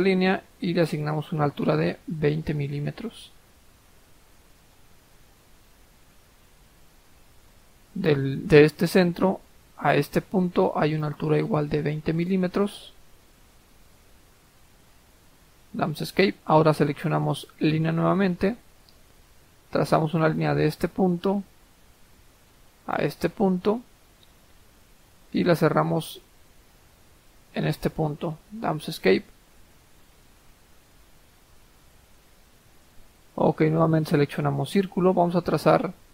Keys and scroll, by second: 2.0-2.9 typing, 13.1 typing, 13.8 Return, 14.8 Escape, 24.0-24.8 typing, 28.2 Escape.